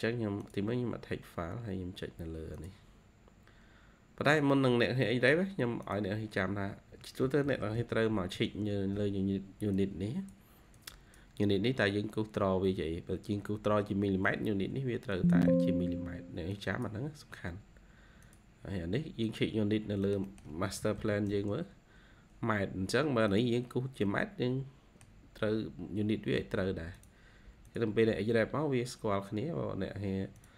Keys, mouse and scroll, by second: 7.4 typing, 14.6 ctrl+q, 15.0 ctrl+click, 15.1 ctrl+q, 20.0 middle click, 20.2 middle click, 20.6-20.9 typing, 23.8 scroll down 1.